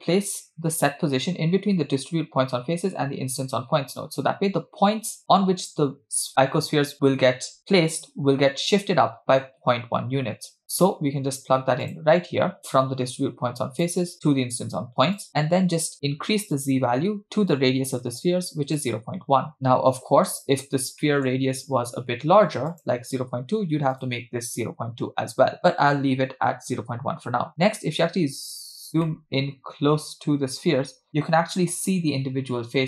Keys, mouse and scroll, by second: 12.6 click, 12.6-13.2 scroll down 1, 13.3 click, 15.2 click, 16.5-18.8 drag, 19.5-20.5 middle drag, 21.2 middle click, 21.9-23.3 scroll up 3, 23.3 click, 25.6-26.1 scroll up 4, 26.1-26.7 scroll down 1, 26.7 scroll down 3, 26.8-27.2 scroll up 2, 27.6 scroll down 1, 28.3 scroll up 1, 29.2-30.6 shift+middle drag.